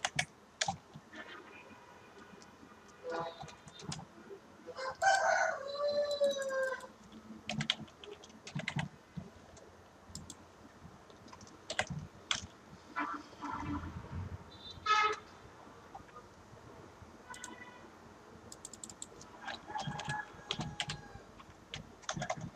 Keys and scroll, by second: 11.6 ctrl+j.